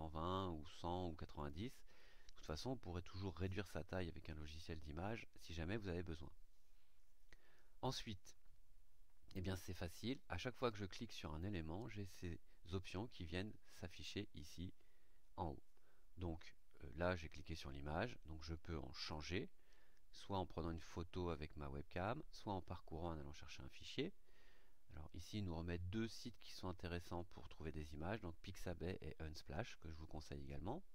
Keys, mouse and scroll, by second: 1.3 click, 10.6 click, 18.9 click.